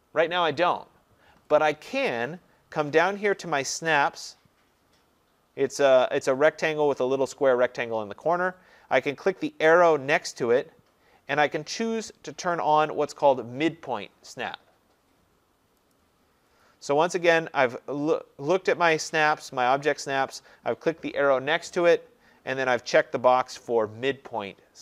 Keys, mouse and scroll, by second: 10.4-15.5 drag, 16.0-21.1 drag.